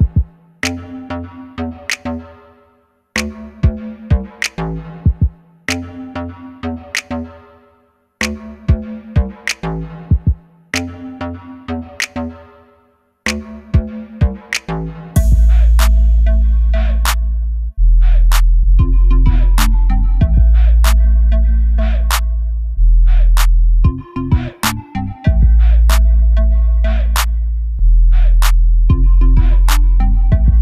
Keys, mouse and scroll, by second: 0.3 click, 0.6 s, 2.6 Escape, 3.2 s, 4.6 click, 4.9 g, 6.1 click, 6.8 s, 8.5 click, 9.8 g, 11.2 click, 11.4 s, 12.7 click, 12.8 g, 13.6 click, 14.0 Delete, 15.6 click, 15.7-19.1 middle drag, 18.4 1, 19.1-20.4 drag, 20.6 Tab, 20.8 click, 21.0 scroll down 1, 21.8 click, 22.0 scroll down 1, 22.2-23.3 middle drag, 23.8-29.5 drag, 29.6-30.6 middle drag.